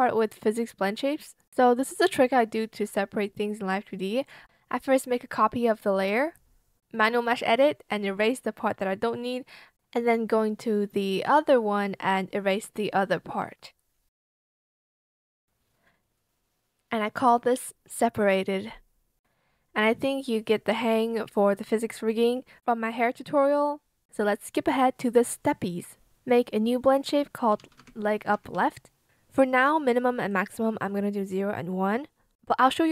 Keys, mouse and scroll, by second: 0.3 ctrl+c, 0.6 ctrl+v, 6.8 b, 6.9 click, 18.2 ctrl+z, 24.9 ctrl+z, 26.2-28.4 typing.